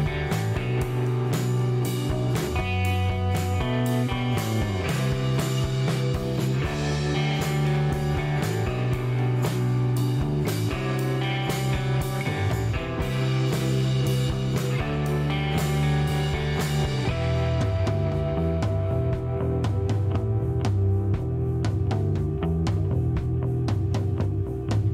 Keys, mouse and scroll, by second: 0.0 scroll up 1, 0.5 middle click, 1.0 scroll down 1, 1.4 middle click, 2.0 scroll up 1, 2.4 middle click, 6.5 click, 7.9 click, 8.7 click, 9.9 click, 11.1 click, 13.7 click, 14.2 right click, 14.8 middle click, 15.8 right click, 16.2 middle click, 17.3 click, 18.1 click, 18.9 click, 19.9 click, 20.9 KP_6, 21.0 KP_0, 21.4 KP_Enter, 22.9 click, 23.6 click.